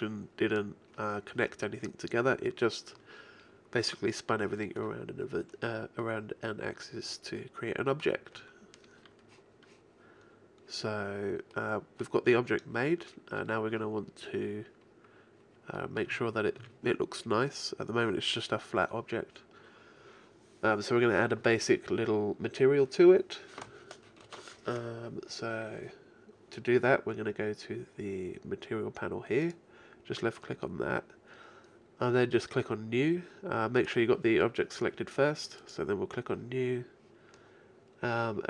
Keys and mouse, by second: 0.0 middle click, 6.0-9.3 middle drag, 11.6-15.8 middle drag, 16.2 Tab, 16.6 a, 29.4-32.0 drag, 33.8-36.9 right drag, 36.9-38.1 drag, 38.1 middle click.